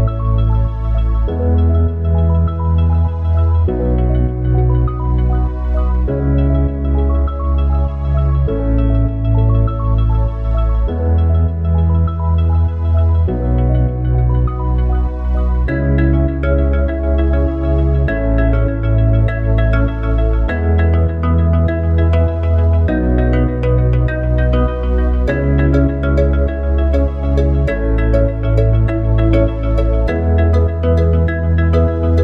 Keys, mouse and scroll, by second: 0.1 click, 6.9 click, 8.6 click, 9.7 click, 10.2 click, 11.1 click, 11.6 click, 12.0 click, 12.5 click, 12.9 click, 21.8-32.2 drag.